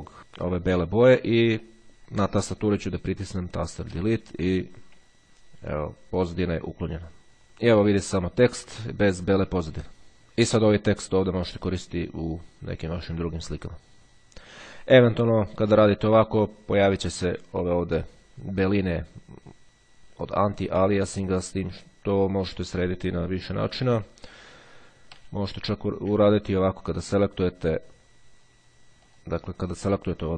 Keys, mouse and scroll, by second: 0.2-0.7 ctrl+scroll up 2, 4.1 Delete, 15.9-16.5 ctrl+scroll up 1, 21.4-22.3 ctrl+scroll down 1, 22.3-23.0 ctrl+scroll down 1, 23.0-23.3 ctrl+scroll down 1, 24.9 z, 27.9 click, 29.3 click.